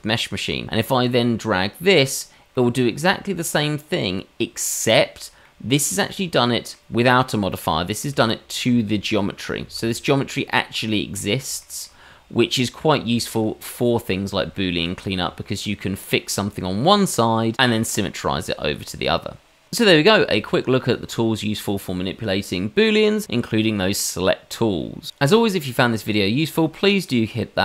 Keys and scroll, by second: 8.2 shift+z, 9.6 shift+z, 15.2 Tab.